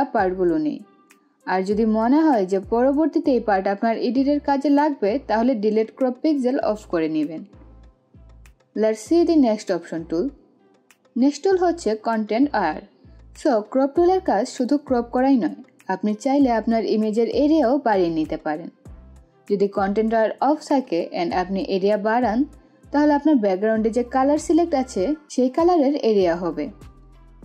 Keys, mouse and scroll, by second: 0.7 click, 2.0 click, 5.5 click, 5.8 ctrl+z, 19.7 ctrl+z, 20.9-25.9 drag.